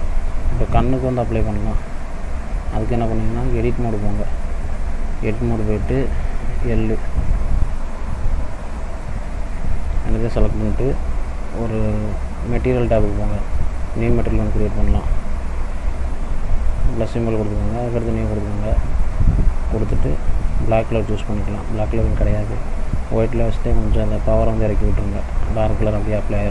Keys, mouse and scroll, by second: 0.7 click, 2.3 click, 4.2 middle click, 4.7 click, 6.3 l, 9.5 l, 13.1 click, 16.7 click, 18.1 click, 19.1 scroll down 2, 20.0 click.